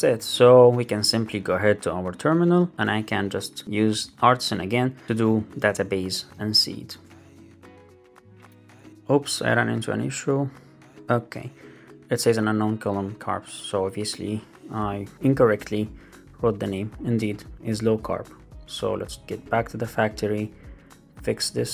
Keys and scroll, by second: 6.8 Return, 17.7 super+c.